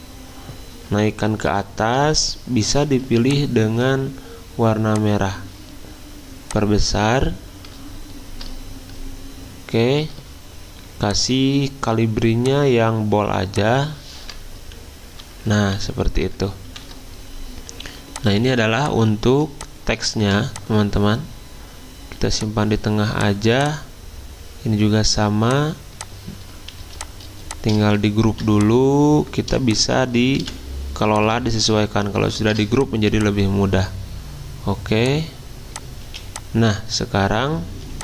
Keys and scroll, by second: 14.6 alt+Down, 15.7 alt+Left, 16.2 alt+Left, 16.7 alt+Right, 18.4 z, 22.7 v, 26.8 z, 28.3 ctrl+g, 30.3 v, 36.1 z, 37.9 v.